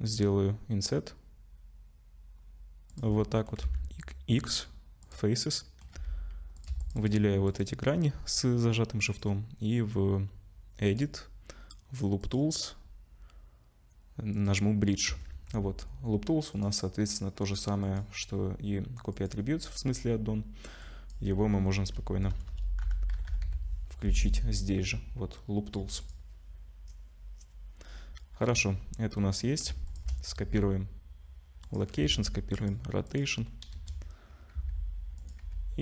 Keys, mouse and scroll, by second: 3.1 middle click, 3.6 x, 5.3 middle click, 6.0 2, 6.6 click, 6.8 alt+shift+click, 9.1 click, 10.9 click, 14.3 click, 14.8-15.3 scroll up 2, 15.3 Tab, 16.5 click, 17.8 click, 28.4 middle click, 29.3-29.9 scroll down 2, 29.9 shift+click, 30.4 ctrl+c, 32.0 ctrl+c, 33.1 click, 33.7 KP_0, 34.6 s, 35.4 g.